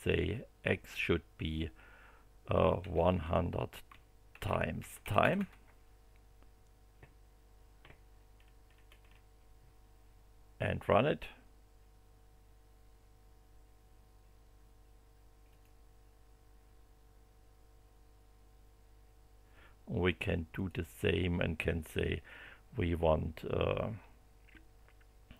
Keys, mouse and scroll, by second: 2.5-3.4 typing, 4.5-5.8 typing, 8.3 scroll down 2, 9.0 scroll down 2, 10.7 click, 15.5 click, 20.5 click.